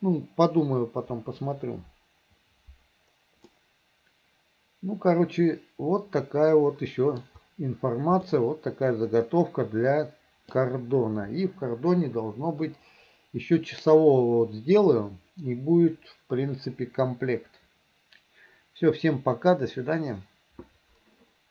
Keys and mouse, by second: 3.5-7.2 middle drag, 8.3-10.6 middle drag.